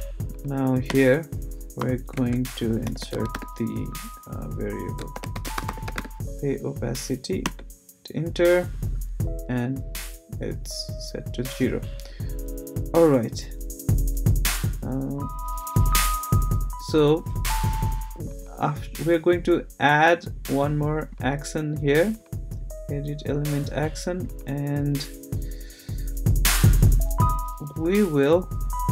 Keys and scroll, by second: 0.9 Return, 1.8-3.8 typing, 4.9-6.4 typing, 7.4 Return, 27.7 Return.